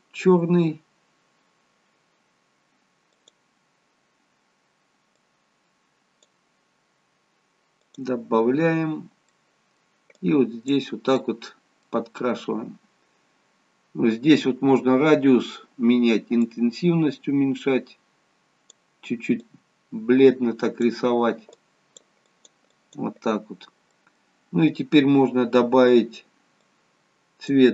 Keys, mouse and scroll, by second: 3.1 click, 9.2 middle click, 10.1 click, 11.1 middle click, 12.1-13.1 scroll down 1, 13.1 scroll down 1, 16.3 click, 23.8 click, 23.8 middle click, 26.5 click.